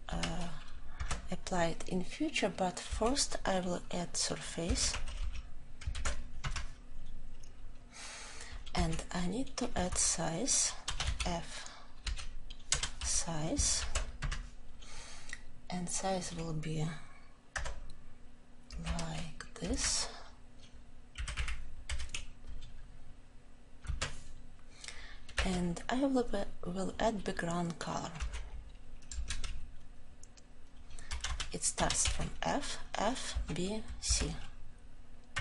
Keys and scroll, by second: 0.9 Tab, 5.9 ctrl+j, 6.3 Return, 13.7 ctrl+j, 14.2 Return, 35.3 Return.